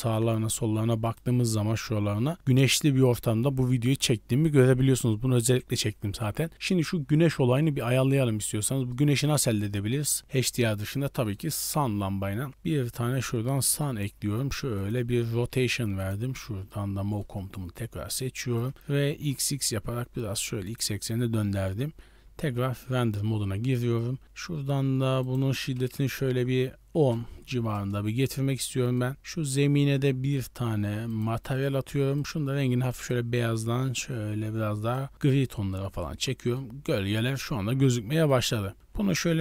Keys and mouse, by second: 0.1-1.3 drag, 7.9 click, 8.8 middle drag, 9.9 KP_3, 11.1 shift+middle drag, 11.6 click, 12.2 shift+a, 13.9 r, 15.2 t, 16.2 t, 16.6-17.2 middle drag, 18.1 click, 18.7 r, 22.2 z, 25.2-28.2 drag, 28.5 middle click, 30.3 drag, 31.1 drag, 32.1 click, 35.6 middle click, 37.9 middle click, 38.7 r.